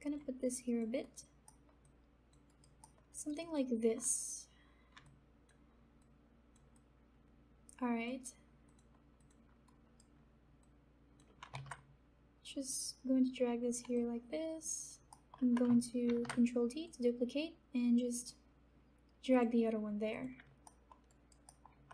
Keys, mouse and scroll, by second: 0.4 alt+click, 1.0 alt+right click, 1.4 alt+middle click, 1.8 alt+click, 2.4 alt+right click, 2.7 alt+middle click, 3.1 alt+right click, 3.3 alt+click, 5.0 alt+click, 6.2 click, 7.8 alt+click, 9.6 alt+right click, 10.6 click, 11.6 ctrl+z, 12.7 click, 13.9 alt+click, 15.1 alt+middle click, 16.0 ctrl+d, 16.8-19.3 drag, 20.6 alt+middle click, 21.0 alt+right click, 21.4 alt+middle click.